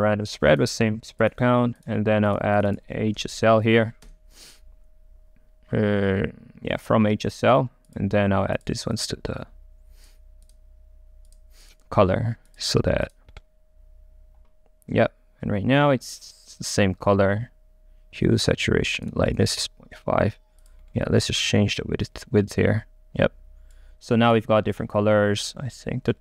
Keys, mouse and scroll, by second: 4.1 Delete, 9.4-13.4 drag, 13.4-15.7 middle drag, 19.1 click, 21.3 right click.